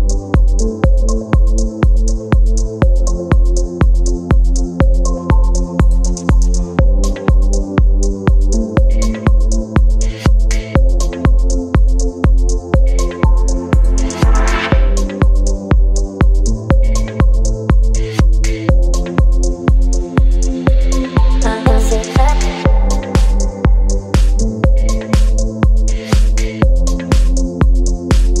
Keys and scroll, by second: 1.3 ctrl+z, 4.9 space, 8.2 space, 10.6 space, 12.2 Return, 14.6 space, 15.6 ctrl+t, 22.0 Return, 23.3 Delete, 23.7 v, 24.1 ctrl+j, 24.3 ctrl+t, 25.5 Return, 25.8 Down, 26.8 ctrl+t, 27.7 space.